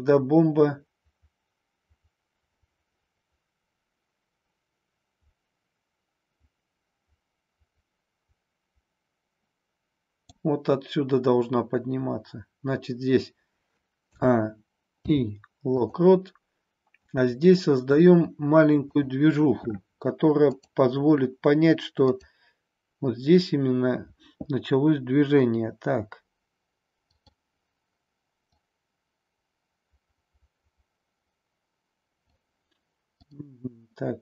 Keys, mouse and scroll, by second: 14.0 a, 14.9 i, 17.0 click, 18.8-21.8 drag, 22.0 click, 27.0-32.4 drag.